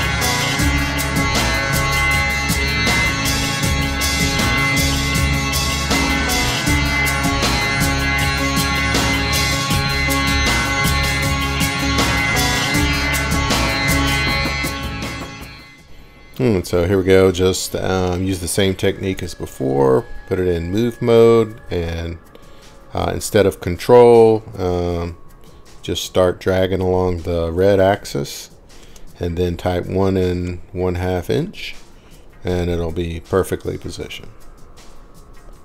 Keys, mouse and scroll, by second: 0.6 middle click, 1.4-2.5 scroll up 9, 2.5 scroll down 1, 2.7-3.6 scroll up 19, 5.6 click, 5.6 scroll, 6.7 click, 9.1 Escape, 14.0 click, 14.5 click, 16.6 m, 27.6 click, 28.0 typing, 29.1-30.8 typing, 31.3 Return, 34.0-35.6 scroll.